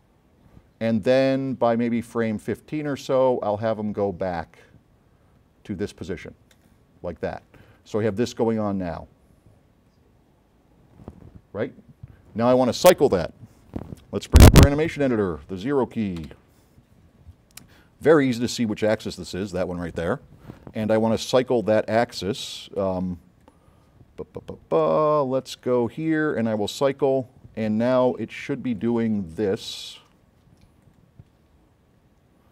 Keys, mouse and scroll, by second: 1.6-3.0 drag, 4.1-6.0 drag, 6.6 click, 8.7-10.5 drag, 12.7 drag, 16.3 0, 18.7 click, 19.4 middle click, 19.5 middle click, 26.7 click, 28.3 click, 30.9 click.